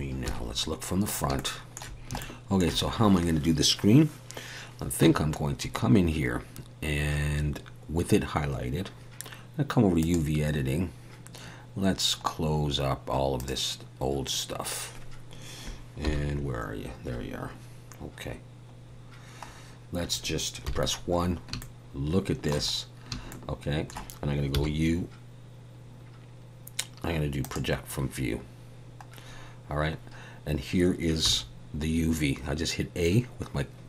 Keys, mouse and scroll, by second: 0.2 KP_1, 1.0-1.3 scroll up 3, 1.3 shift+middle click, 2.7 shift+middle click, 5.0 Tab.